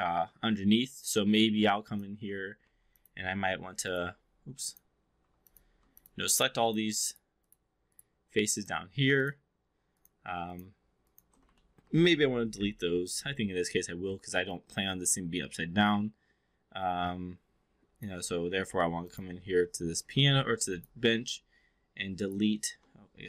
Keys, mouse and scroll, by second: 0.9-3.5 typing, 2.9 click, 3.7 click, 5.4 click, 6.3 shift+click, 7.0 shift+click, 7.4 shift+click, 8.5 shift+click, 9.8 shift+click, 10.9 shift+click, 11.5 alt+middle drag, 12.5 Delete, 14.5-18.1 alt+drag, 18.7 4, 19.0 click, 19.9 4, 20.3 3.